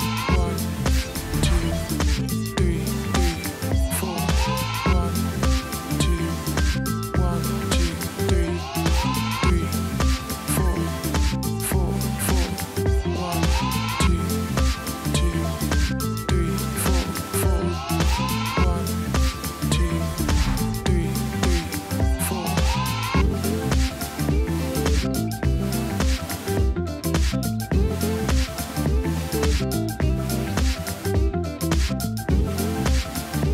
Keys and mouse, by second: 0.3 space, 0.5 click, 1.7 space, 1.8 click, 2.6 space, 2.6 click, 2.7 space, 4.9 shift+click, 5.5 click, 6.7 Return, 8.0 click, 8.5 space, 8.7 click, 9.0 space, 13.9 Tab, 15.0 Tab, 16.7 click, 19.0 Tab, 20.5 click, 22.8 click, 23.5 shift+click, 24.1 v, 24.3 click, 25.3 click, 25.8 ctrl+t, 26.0 click, 26.6 Return, 26.8 click, 27.0 t, 27.0 click, 27.7 Return, 29.4 click, 30.6 click, 30.8 space, 31.0 click, 31.3 space, 31.8 b.